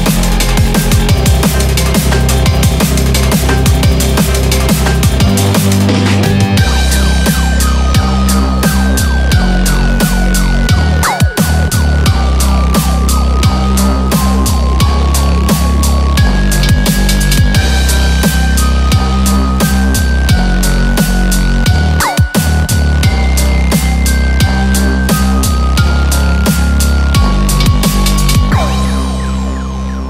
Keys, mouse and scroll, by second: 0.2 click, 0.8 click, 2.0 click, 7.7 click, 10.0 ctrl+z, 10.2 ctrl+z, 10.4 ctrl+z, 10.9 ctrl+z, 12.0 middle click, 12.8 click, 13.0 scroll up 4, 13.3 middle click, 13.9-14.3 scroll down 3, 14.1 middle click, 15.8-16.1 scroll up 1, 16.9 click, 19.2 scroll down 2, 19.3 middle click, 19.8-20.4 scroll up 1, 20.5 click, 24.1 middle click, 25.8 click, 29.7 middle click.